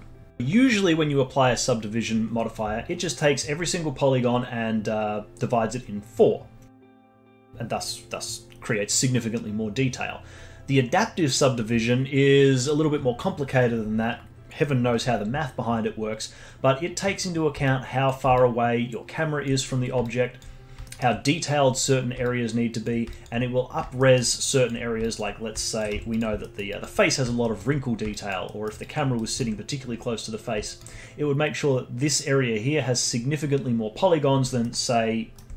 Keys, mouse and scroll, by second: 2.3-3.5 scroll up 5, 3.5-5.9 scroll up 4, 7.4-8.2 scroll down 6, 8.9-9.7 scroll down 3, 16.6-17.6 scroll down 5, 17.6 click, 18.3-19.6 alt+drag, 19.6-20.0 scroll up 4, 20.0-20.5 alt+drag, 20.5 scroll up 3, 20.8-21.8 alt+middle drag, 21.8-22.2 scroll down 2, 22.2-24.0 alt+drag, 24.0 alt+middle drag, 24.2-24.7 alt+drag, 24.7-25.6 scroll up 4, 25.0 alt+drag, 25.6 alt+click, 25.9 z, 26.4 alt+middle drag, 26.7-27.4 alt+drag, 27.4-28.1 alt+middle drag, 28.1-28.4 alt+drag, 28.4-28.8 alt+middle drag, 28.8 alt+click, 29.1 alt+right click, 30.4 scroll down 1, 30.7-33.7 alt+right drag, 34.6-35.5 alt+middle drag.